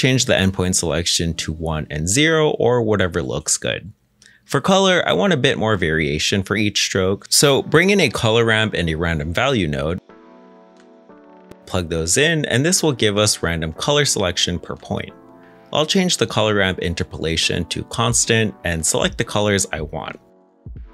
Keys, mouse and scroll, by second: 1.5 shift+click, 3.1 middle click, 5.4 scroll down 1, 6.0 middle click, 7.0 scroll up 1, 7.3 middle click, 7.7-9.1 typing, 9.3 Return, 10.6-11.9 typing, 11.9 Return, 12.9 g, 16.1 middle click.